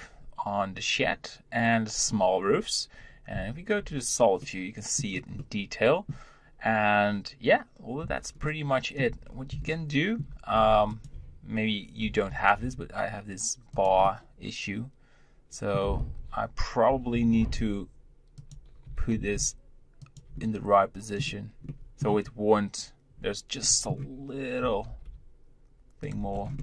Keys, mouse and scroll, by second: 4.3-9.2 middle drag, 9.2-9.6 scroll up 3, 9.6-10.8 shift+middle drag, 10.8 click, 12.0 g, 14.0-16.8 middle drag, 16.8 g, 18.8 g, 20.3-23.1 middle drag, 23.1 scroll up 1, 23.6-24.5 middle drag, 24.5 g, 26.2 scroll down 1, 26.5-26.6 middle drag.